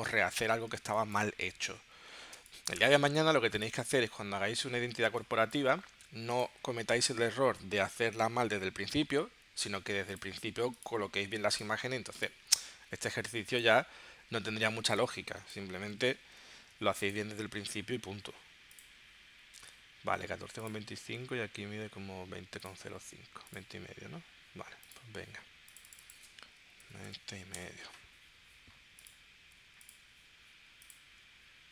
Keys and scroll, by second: 0.8 space, 2.4 space, 5.0 space, 13.1 space, 16.2 super+g, 26.4-27.3 typing, 27.5 Return.